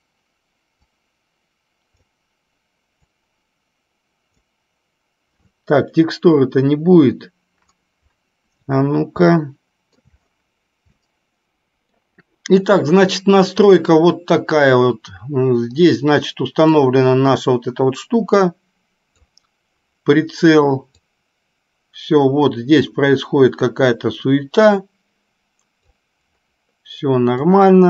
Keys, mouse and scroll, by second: 11.4 middle click, 13.8 click, 16.8-19.5 drag, 21.2-26.0 drag, 27.7-27.8 drag.